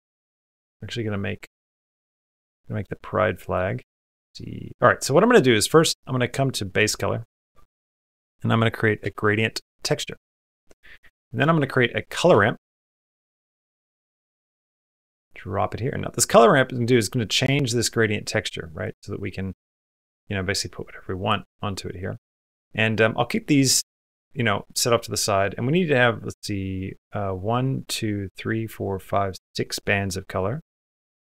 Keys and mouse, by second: 4.2 click, 5.1 middle click, 6.4-10.0 drag, 11.1 click, 11.4 shift+a, 16.1-18.7 drag, 19.5-21.2 drag, 21.8 click, 22.9 click, 30.6 click.